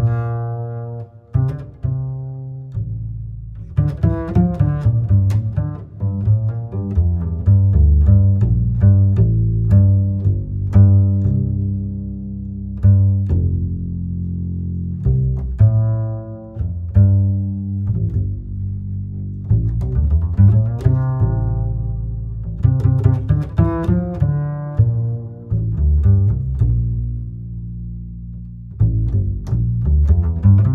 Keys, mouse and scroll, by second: 0.9-1.4 scroll down 4, 1.4-2.9 middle drag, 2.9-5.5 drag, 5.5-7.2 middle drag, 7.2-10.1 drag, 10.1-12.3 middle drag, 12.3 space, 14.4 space, 20.1 click, 23.1-29.0 drag.